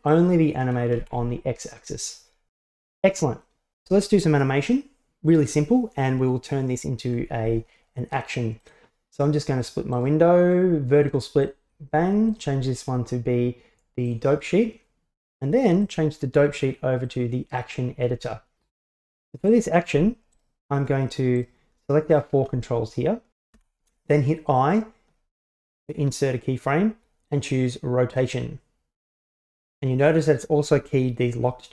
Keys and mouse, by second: 0.2-1.2 drag, 2.8-3.5 middle drag, 10.2-11.6 right drag, 12.4-14.3 drag, 16.0-17.3 drag, 19.6-20.0 right drag, 20.4-21.5 shift+right drag, 22.2 shift+right click, 23.6 i.